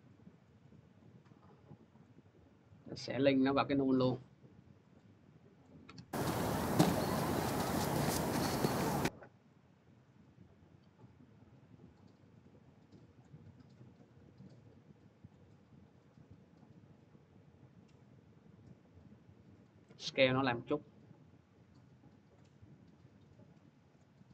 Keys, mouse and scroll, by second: 1.7 click, 3.5 click, 5.4 click, 13.0-17.4 drag, 19.4 click, 19.7 s, 22.1 click, 22.8 s, 23.8 click.